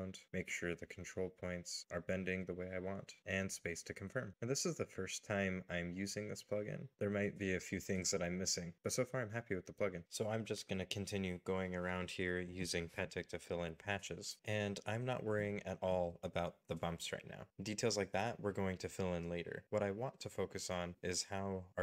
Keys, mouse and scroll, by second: 0.8 right click, 2.5 middle click, 3.0 space, 3.5 middle click, 4.1 middle click, 4.9 scroll up 1, 5.4 space, 5.5 shift+middle click, 6.4 middle click, 6.6 space, 6.9 middle click, 7.6 middle click, 7.7 right click, 8.2 scroll down 1, 8.5 right click, 8.7 right click, 8.9 middle click, 9.0 z, 9.1 double click, 9.1 z, 9.4 right click, 9.8 middle click, 10.2 scroll down 1, 10.2 right click, 10.5 middle click, 11.5 middle click, 11.7 right click, 12.3 middle click, 12.5 scroll down 1, 12.5 middle click, 12.5 space, 12.6 right click, 13.0 middle click, 13.1 space, 13.2 right click, 13.4 z, 13.5 right click, 13.7 middle click, 13.7 right click, 13.9 shift+middle click, 13.9 right click, 14.1 scroll down 1, 14.4 Escape, 14.6 middle click, 15.1 shift+click, 15.2 alt+m, 15.5 alt+n, 15.6 middle click, 16.1 alt+click, 16.7 scroll down 1, 17.3 z, 17.4 right click, 17.5 middle click, 17.5 z, 17.6 right click, 17.7 middle click, 18.0 middle click, 18.4 g, 18.6 middle click, 19.7-20.1 scroll up 2, 19.8 middle click, 20.1 middle click, 20.4 right click, 20.9 right click, 20.9 middle click, 21.6 space, 21.7 g.